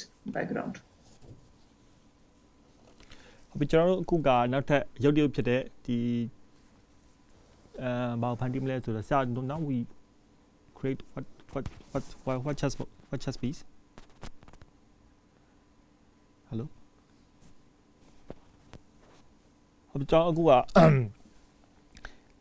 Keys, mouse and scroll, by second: 0.1 scroll down 1, 0.6-1.2 scroll down 1, 1.2-2.9 scroll down 2.